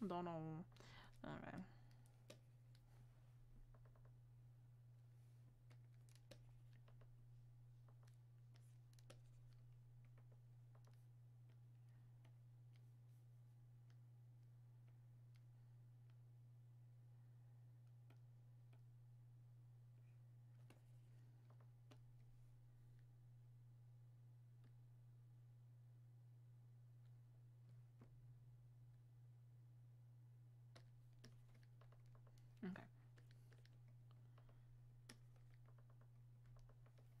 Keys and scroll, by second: 0.7 ctrl+z.